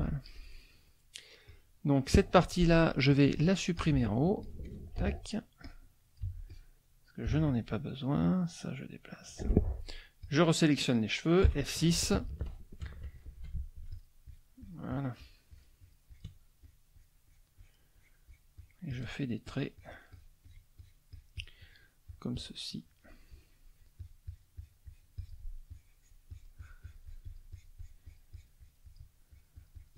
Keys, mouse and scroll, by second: 0.0 F1, 0.4 middle click, 1.4 click, 3.1 click, 3.8 click, 5.0 Delete, 5.7 click, 6.4 Delete, 6.5 click, 7.4 Delete, 8.4-9.4 drag, 10.2 click, 11.4 F6, 13.9 shift+click, 14.2 shift+click, 16.6 shift+click, 17.0 shift+click, 17.9-19.2 shift+drag, 19.5 shift+click, 20.8 shift+click, 22.1-25.5 shift+drag, 25.7-29.1 shift+drag, 29.3-29.9 shift+drag.